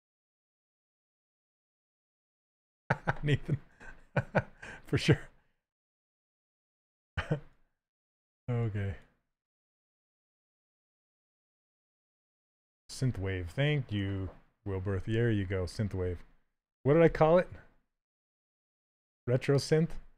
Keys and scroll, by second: 4.2 s, 11.5 s, 17.4 s.